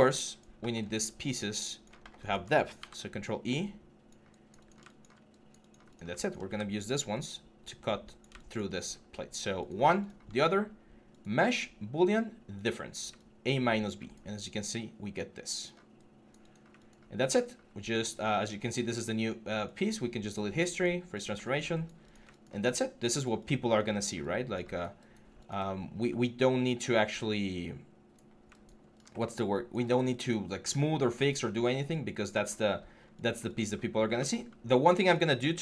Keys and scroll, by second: 2.5 ctrl+e.